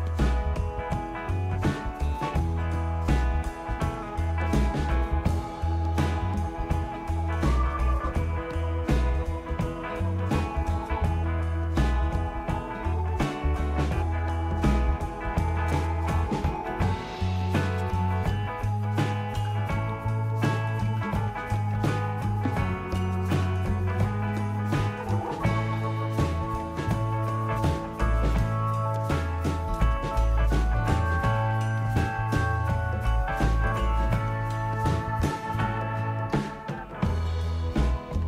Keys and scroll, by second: 6.7 typing, 7.7 typing, 10.7 space, 14.4-23.0 typing, 24.5 typing, 25.5-26.3 typing, 29.0-31.8 typing, 34.5-36.8 typing, 38.0-38.2 typing.